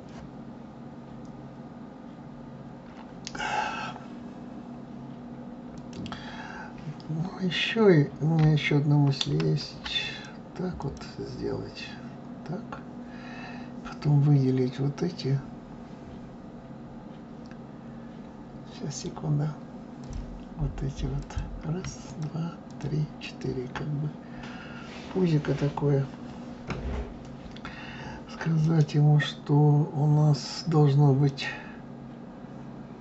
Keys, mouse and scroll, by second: 5.7 click, 9.4 ctrl+r, 12.6-15.1 scroll up 1, 15.1-15.6 scroll up 1, 20.0 click, 21.2 click, 22.0 shift+click, 22.7 shift+click, 23.2 shift+click, 30.2-31.3 right drag.